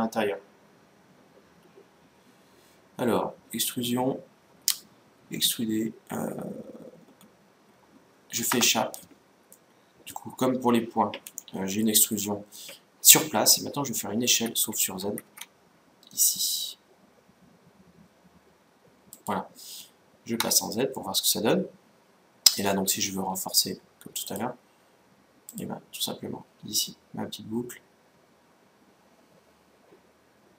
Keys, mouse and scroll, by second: 9.3-10.9 middle drag, 11.2-11.6 scroll up 1, 11.6-13.1 middle drag, 13.5 scroll up 1, 14.1 s, 20.2 z, 20.7-22.6 middle drag, 24.0-25.8 drag.